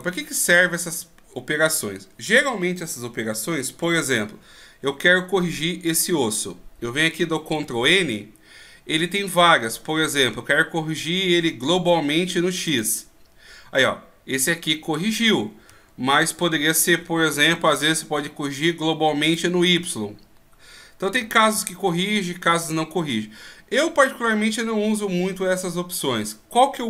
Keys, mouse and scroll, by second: 4.5-7.5 scroll up 2, 7.5 ctrl+n, 16.1 ctrl+z, 17.4 ctrl+n, 21.5 ctrl+z, 23.0-24.7 scroll down 2.